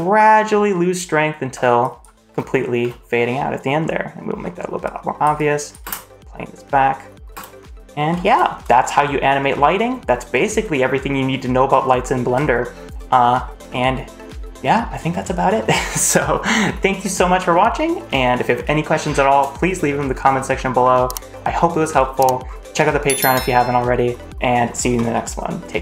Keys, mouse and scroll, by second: 1.4 space, 1.8 click, 2.2 space, 2.3-2.7 scroll up 3, 2.7 space, 3.8-4.1 middle drag, 4.3-4.7 scroll down 2, 4.8-5.2 drag, 5.3-5.6 drag, 5.8 space, 7.2 space, 7.5-8.1 middle drag, 8.3 shift+scroll down 1, 8.9-9.3 scroll down 1, 11.9-12.3 shift+middle drag, 12.3 scroll down 2, 12.5-12.9 scroll up 1, 13.1 shift+middle drag, 18.2 shift+middle drag, 19.4 shift+middle click, 20.5 shift+middle click.